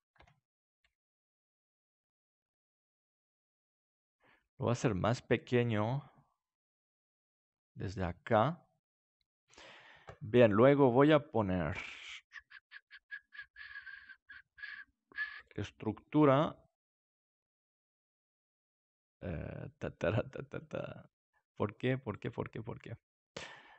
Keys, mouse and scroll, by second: 0.1 Tab, 0.7 s, 3.8-6.8 drag, 6.8-9.5 middle drag, 10.4-12.2 drag, 20.5-23.7 drag.